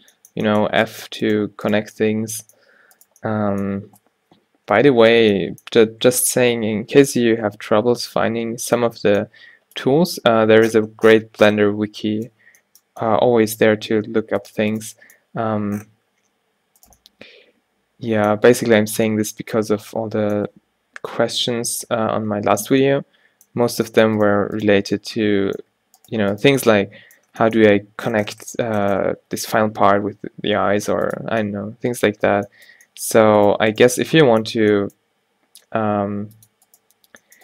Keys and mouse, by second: 3.1-4.8 drag, 5.0-8.5 middle drag, 8.5 alt+o, 11.2 click, 14.5-16.8 drag, 15.0 g, 21.6 ctrl+z, 22.1 ctrl+z, 23.8 g, 27.0-28.2 drag, 27.4 g, 33.5-35.6 drag, 34.8 g, 36.8-37.4 drag, 37.2 g.